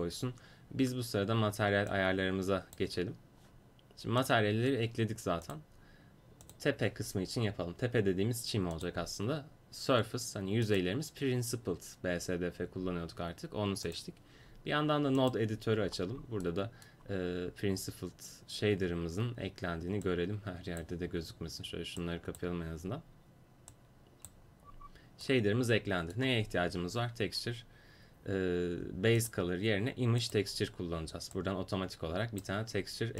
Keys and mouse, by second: 1.9-23.8 drag, 23.8 right click, 23.9-25.8 drag, 29.2-31.3 drag, 31.3-32.4 right drag, 32.4 click.